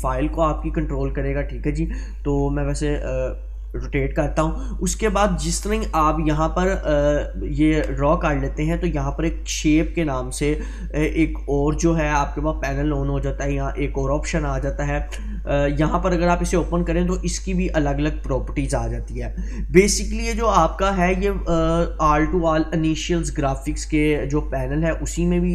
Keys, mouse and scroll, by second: 0.5-2.0 drag, 16.0 click, 20.4 click.